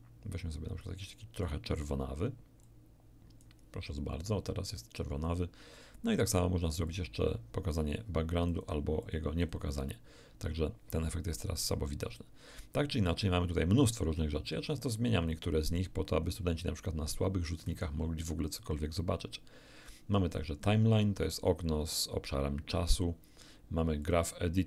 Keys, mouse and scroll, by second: 2.6-3.6 drag, 6.9 click, 8.5 click, 9.0 click, 9.4 click, 13.1-13.6 scroll up 1, 14.2-14.6 scroll up 1, 15.7-16.1 scroll up 2, 16.2 scroll up 2, 16.4 middle click, 17.7 t, 20.3 middle click, 24.0 middle click.